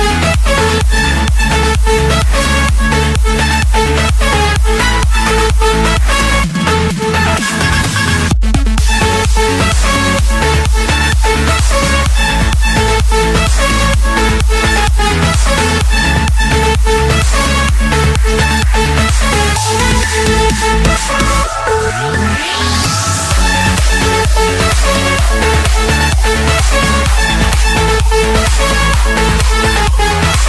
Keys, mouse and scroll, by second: 0.0 Return, 0.9 scroll, 1.7 click, 2.2 click, 3.1 m, 3.3 Return, 5.2-6.2 drag, 6.3 click, 7.2 Escape, 8.7 typing, 9.8 Return, 10.0 Return, 10.7 right click, 11.2 right click, 11.8 right click, 12.0 right click, 12.0 click, 12.7 middle click, 13.1-13.4 scroll, 14.5-15.4 scroll, 15.4 Escape, 16.0 click, 16.4 click, 17.4 click, 18.0 j, 18.8 Return, 22.6 Escape, 25.9 scroll, 26.6 right click, 27.6 click, 29.1 click.